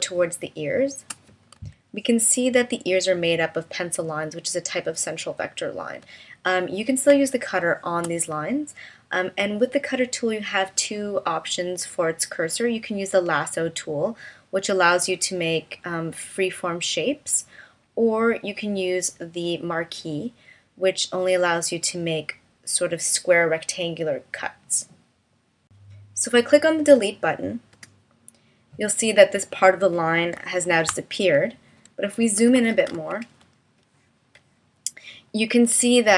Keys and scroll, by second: 1.6 v, 7.1 space, 27.8 BackSpace, 30.3 v, 33.3 space.